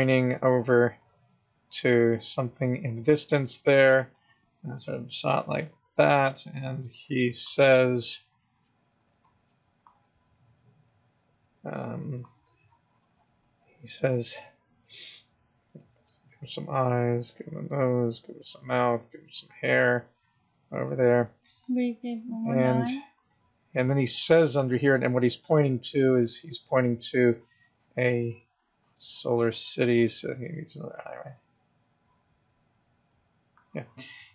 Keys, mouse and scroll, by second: 0.0 click, 0.3 click, 0.7 click, 1.3 click, 2.0 click, 2.3 click, 2.5 click, 4.1 click, 4.4 click, 4.9 click, 5.5 click, 5.9 click, 6.6 click, 7.2 click, 8.1 click, 8.4 click, 9.5 click, 10.0 click, 10.6 click, 10.9 click, 11.1 click, 11.4 click, 11.5 click, 11.7 click, 11.9 click, 12.1 click, 12.7 click, 15.5 click, 16.1 click, 16.9 click, 17.1 click, 17.9 click, 19.0 click, 21.4 click, 21.9 click, 26.0 click, 26.2 click, 27.2 click, 28.0 click, 28.3 click, 28.9 click, 29.4 click, 29.8 click, 31.2 click, 33.6 click.